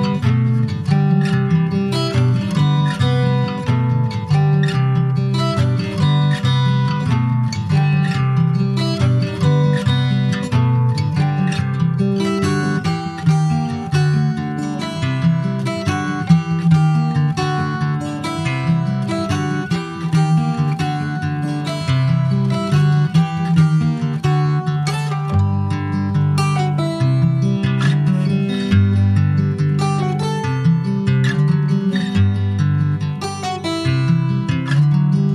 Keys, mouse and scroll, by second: 0.2 click, 2.5 alt+middle click, 2.8 alt+scroll up 3, 3.4-3.7 scroll up 2, 3.7 middle click, 4.2-5.1 scroll up 6, 4.4 shift+middle click, 5.7 click, 8.0 scroll down 2, 8.2 middle click, 8.9 ctrl+s, 9.1 alt+middle click, 9.6 alt+middle click, 10.6 ctrl+s, 10.8 shift+middle click, 11.4 click, 12.4 ctrl+s, 13.1 shift+middle click, 13.4 shift+scroll up 2, 13.9 click, 15.4 click, 17.9 click, 18.4 ctrl+s, 18.8 click, 19.2-22.4 middle drag, 22.4 s, 24.2 click, 24.6 middle click, 25.1 ctrl+s, 25.3 click, 26.0 /, 26.9 Tab, 27.2 middle click, 27.4 scroll up 1, 27.6 middle click, 28.4 click, 28.7 scroll up 3, 30.0 alt+shift+click, 30.8 x, 31.8 click, 32.6 l.